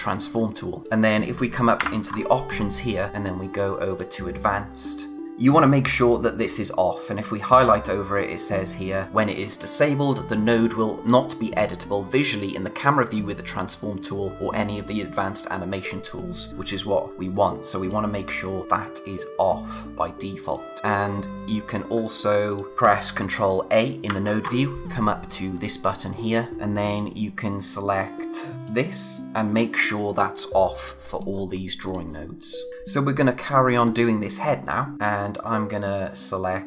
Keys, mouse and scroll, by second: 0.8 click, 1.8 ctrl+u, 3.8 click, 20.4 click, 21.0-21.9 scroll down 1, 21.9-22.4 scroll up 1, 22.4 click, 24.0 ctrl+a, 25.5 click, 28.5 click, 32.7-34.2 scroll up 1, 34.9 click.